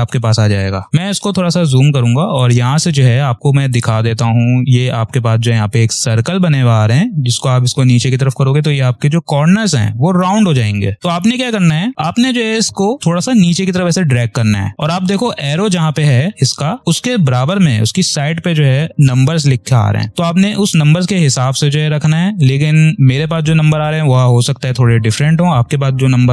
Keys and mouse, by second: 0.9 ctrl+=, 1.7 click, 2.1 space, 3.6 ctrl+click, 6.7-10.9 drag, 10.9 ctrl+z, 12.9-21.3 drag.